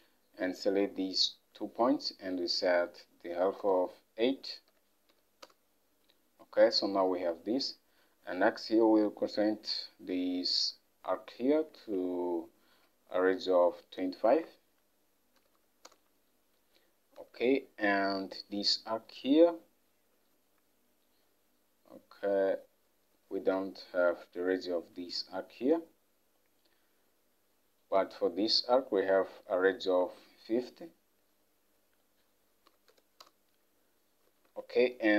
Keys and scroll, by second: 3.4 typing, 4.8-5.2 typing, 5.5 Return, 11.9 alt+Tab, 15.5 typing, 15.9 Return, 17.4 alt+Tab, 30.1 alt+Tab, 32.8-33.4 typing, 33.3 Return, 34.5 alt+Tab.